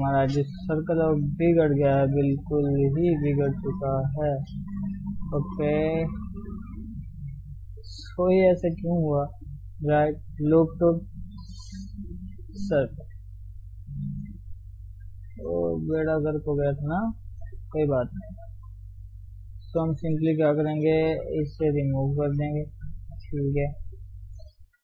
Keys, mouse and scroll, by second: 0.6 r, 5.1 ctrl+z, 5.6-7.7 middle drag, 7.7-8.1 scroll down 2, 8.1-9.5 middle drag, 9.5 scroll up 1, 9.6-12.6 right drag, 12.9-14.1 middle drag, 14.1 shift+z, 14.5 middle click, 15.2 s, 17.3 middle click, 17.8 ctrl+z, 18.3-19.5 middle drag, 19.5 KP_3, 23.1 x, 23.6 click.